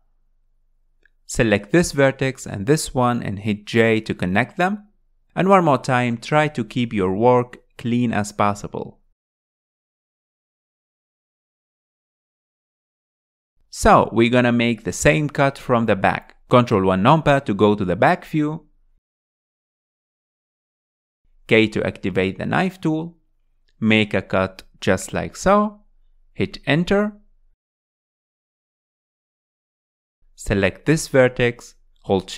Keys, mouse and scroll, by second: 0.5-2.3 middle drag, 0.5-1.2 scroll up 4, 2.3 click, 3.3 shift+click, 5.2 j, 6.5 scroll down 4, 6.7-7.9 middle drag, 7.9 click, 8.1 middle click, 9.2 click, 9.5 click, 10.0 middle click, 10.4 click, 11.5 middle click, 12.1 click, 13.0 click, 13.5-16.7 middle drag, 17.4 ctrl+KP_1, 18.5 space, 18.6 click, 19.1 space, 19.2 space, 19.9-20.9 shift+middle drag, 20.9 alt+z, 21.5 alt+z, 22.6 k.